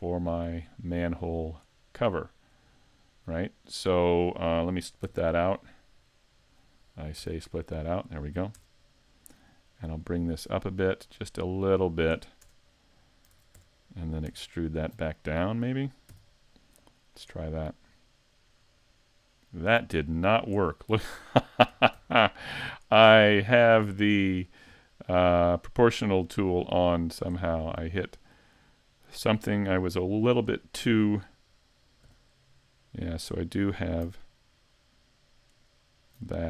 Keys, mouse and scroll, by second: 1.6 click, 1.8-2.2 scroll up 2, 2.2 shift+middle click, 2.7 middle click, 5.1 o, 7.2 p, 8.6 Tab, 9.0 right click, 10.0 click, 12.5 Tab, 13.3 ctrl+Tab, 14.6 alt+right click, 16.1 e, 17.1 click, 17.9 click, 22.0 super+z, 25.3 click, 27.6-28.1 scroll up 2, 28.1 middle click, 30.5 right click, 32.1 g, 33.3 right click, 35.6 alt+right click.